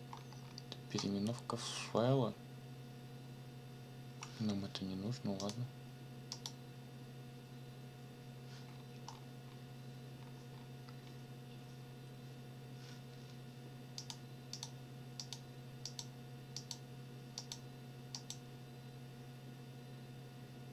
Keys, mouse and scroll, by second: 0.1-0.6 scroll down 2, 0.9-1.6 scroll up 4, 5.4 click, 6.3 click, 8.7-9.7 scroll up 6, 10.2-11.2 scroll down 6, 14.0 click, 14.5 click, 14.8-15.2 scroll up 1, 15.2 click, 15.5-15.8 scroll up 1, 15.8 click, 16.1-16.5 scroll up 1, 16.6 click, 17.4 click, 18.1 click.